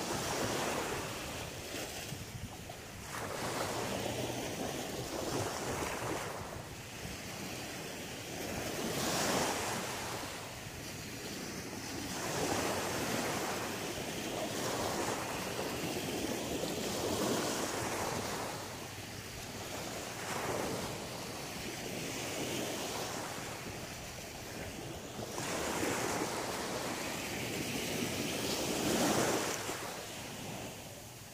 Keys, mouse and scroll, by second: 2.5 click, 3.1 right click, 3.6 alt+right click, 4.3 alt+shift+right click, 4.8 alt+right click, 5.4 alt+shift+right click, 6.0 alt+shift+right click, 6.4 alt+shift+right click, 7.7 middle click, 8.8 alt+shift+right click, 9.3 shift+middle click, 10.2 scroll up 2, 11.1 alt+shift+right click, 11.9 shift+right click, 12.9 shift+right click, 13.4 alt+shift+right click, 14.1 alt+shift+right click, 14.4 shift+right click, 15.0 shift+right click, 15.8 shift+right click, 16.1 middle click, 17.0 shift+right click, 17.5 middle click, 19.1 shift+right click, 19.5 middle click, 20.8 b, 23.5 x, 24.5 middle click, 25.4-26.1 scroll down 6, 26.1 middle click, 27.9 click.